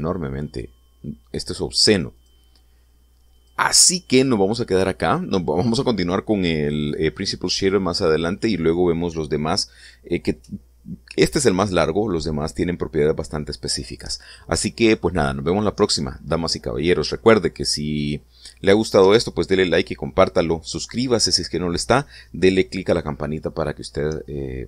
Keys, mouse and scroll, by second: 3.2 click, 4.5 click.